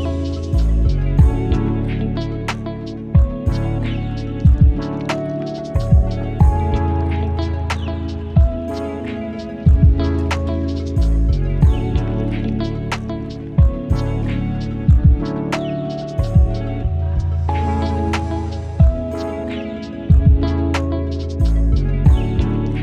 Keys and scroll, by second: 20.8 ctrl+alt+j.